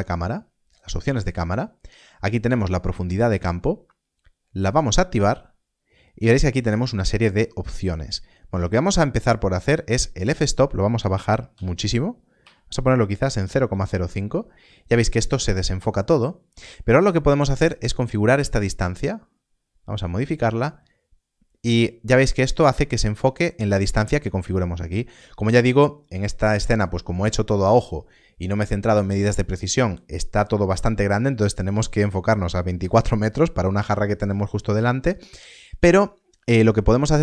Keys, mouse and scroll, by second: 0.6 click, 10.1 click, 11.4 Left, 13.7 Return, 18.0 Return.